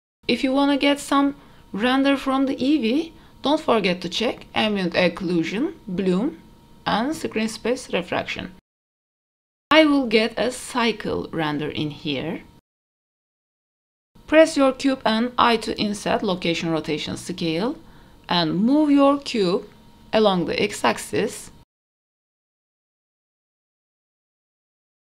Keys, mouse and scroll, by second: 0.2 click, 0.8 click, 3.7 click, 4.5 click, 5.1 click, 6.1 click, 7.0 click, 8.6 click, 9.5 click, 11.7-13.2 drag, 14.1-15.4 middle drag, 19.5 click, 20.4-22.2 scroll down 9, 20.6 middle drag, 21.0 middle drag, 21.5 shift+middle click, 21.8 shift+middle click, 22.5 shift+middle click, 23.4 g, 24.9 g.